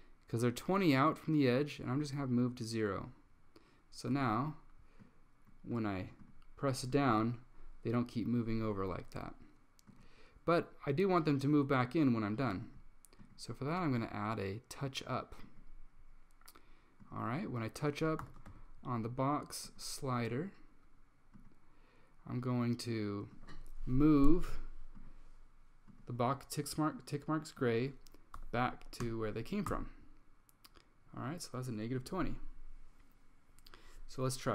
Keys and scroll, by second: 1.2 typing, 4.2 Tab, 18.1-19.1 typing, 28.2-29.6 typing, 29.8 Tab.